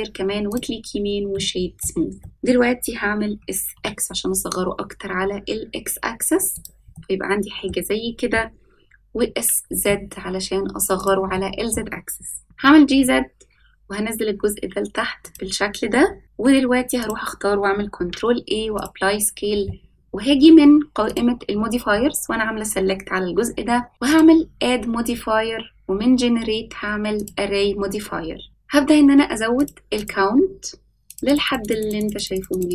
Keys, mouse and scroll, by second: 1.3 middle click, 2.2 middle click, 3.3 s, 6.9-7.6 middle drag, 9.2 s, 11.3-11.7 middle drag, 12.4 g, 16.2 shift+middle click, 16.2-17.0 scroll up 1, 17.0 click, 17.9 ctrl+a, 21.0 click, 24.0-28.5 drag, 29.5 click, 31.0 click, 31.9 click, 32.5 click, 32.6 click.